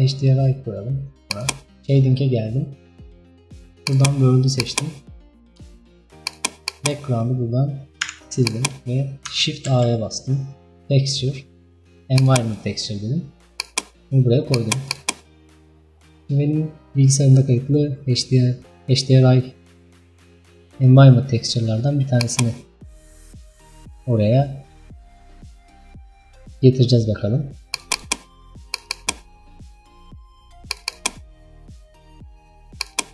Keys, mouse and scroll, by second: 1.5 click, 2.2-3.4 scroll down 8, 8.1 Delete, 15.2-23.0 drag, 31.3-33.1 drag.